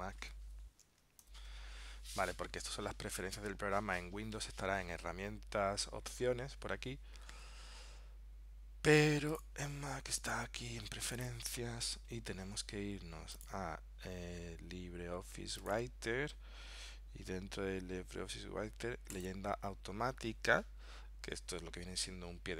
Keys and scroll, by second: 1.3 ctrl+alt+super+p.